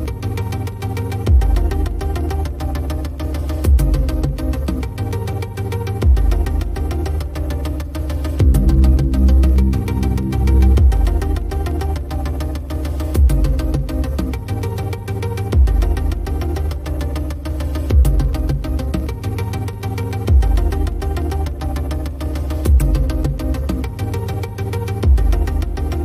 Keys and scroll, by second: 8.5 i.